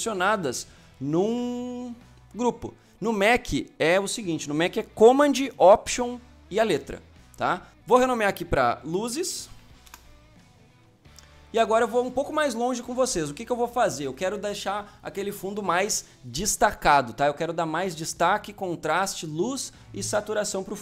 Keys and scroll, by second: 9.2-9.8 typing.